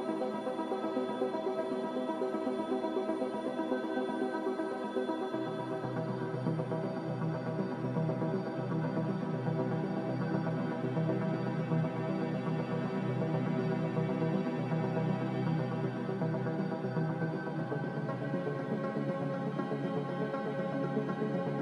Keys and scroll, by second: 11.2 g, 16.5 Escape, 16.7 Escape, 16.9 Escape, 17.4 z.